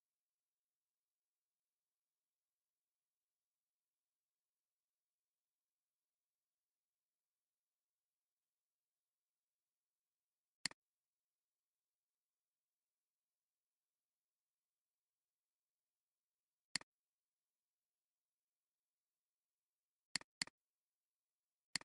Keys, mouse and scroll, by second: 5.2-7.8 drag, 8.0 right click, 17.3 click, 20.2 double click.